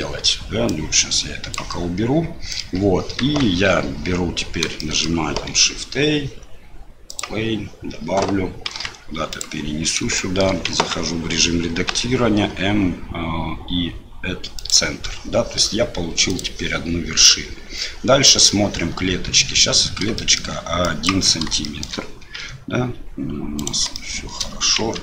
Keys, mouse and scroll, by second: 0.7 click, 2.5 middle click, 3.2 KP_7, 4.8 shift+middle click, 4.9 shift+click, 5.5 shift+a, 8.7 g, 10.3 shift+middle click, 10.7 Tab, 11.9 m, 16.3 click, 20.2 shift+middle click, 20.8 click, 21.6 shift+middle click, 22.4 g, 23.9 shift+click, 24.8 Tab.